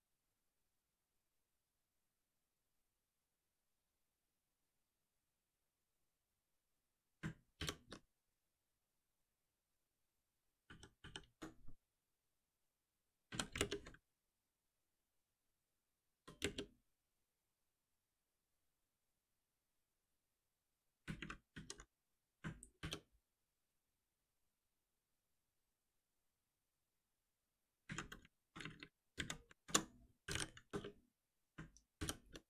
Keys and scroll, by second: 5.5 ctrl+y, 7.5 shift+F10, 10.6 ctrl+z, 13.6 alt+Return, 19.0 ctrl+y, 22.7 shift+F10, 29.5 ctrl+shift+Left, 30.6 Return, 31.9 shift+F10.